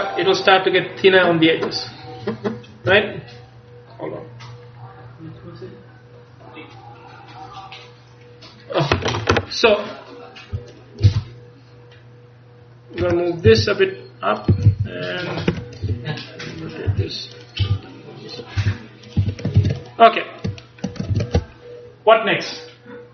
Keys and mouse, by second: 11.1 c, 13.6 g, 14.8 a, 14.8 c, 15.9 r, 17.0 g, 17.7 r, 18.7 g, 19.3 a, 19.7 ctrl+s, 21.2 ctrl+s.